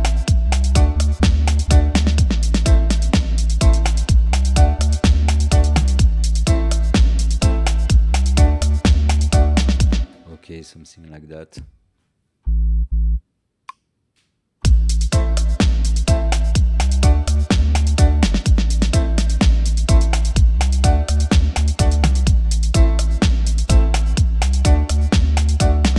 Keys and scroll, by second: 9.9 space.